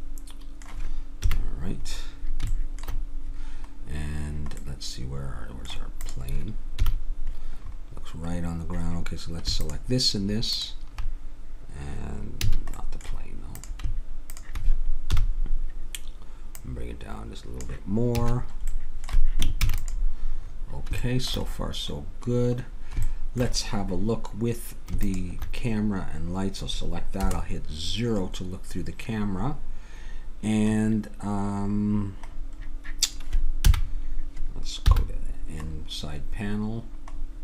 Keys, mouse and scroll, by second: 1.2 KP_1, 6.1 click, 6.8 KP_1, 12.5 a, 13.5-15.1 drag, 15.1 KP_1, 18.2 a, 18.4-21.2 middle drag, 19.6 ctrl+s, 25.0 click, 27.2 KP_0, 28.3 middle click, 33.6 n, 34.9 n.